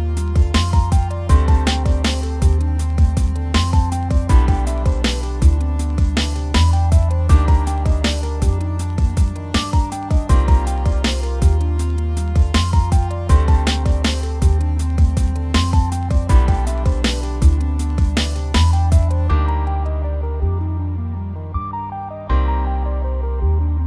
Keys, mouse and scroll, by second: 0.4 scroll up 1, 0.5 scroll down 2, 0.6 shift+middle click, 0.6 scroll up 1, 0.8 middle click, 1.4-2.0 scroll, 1.4 f, 1.6 middle click, 1.8 f, 2.0 click, 2.4 scroll down 1, 2.5 click, 3.1-3.7 scroll up 1, 4.0 click, 4.2 scroll down 1, 4.6 shift+middle click, 5.0 scroll down 2, 5.1 shift+middle click, 5.9 scroll up 1, 6.0 middle click, 6.3-9.7 drag, 9.7 shift+middle click, 10.4 click, 11.2 scroll down 1, 11.3-12.3 drag, 12.3 scroll up 1, 12.4 click, 12.9 scroll down 1, 13.0-16.6 middle drag, 17.5-18.9 drag, 18.9 scroll down 1, 19.0 scroll up 2, 19.2 middle click, 19.4 scroll down 1, 19.5 shift+middle click, 19.5 scroll up 1, 19.7 click, 19.9 scroll down 1, 20.0 shift+middle click, 20.2 click, 20.7 shift+middle click, 21.1 scroll up 1, 21.3 click, 21.6 scroll down 1.